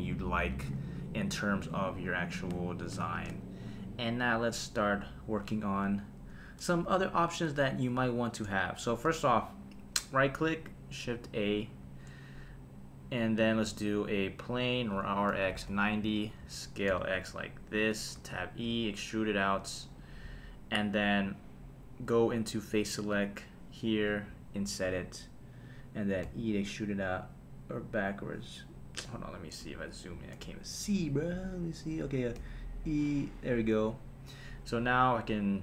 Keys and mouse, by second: 11.2 shift+right click, 11.8 shift+a, 15.2-16.9 typing, 16.1 click, 17.8 click, 18.2 Tab, 18.7 e, 20.0 click, 22.8 click, 23.7 click, 24.3 i, 25.6 click, 26.2 e, 28.8 Escape, 28.8 `, 32.4 e, 33.5 click, 34.6 Tab.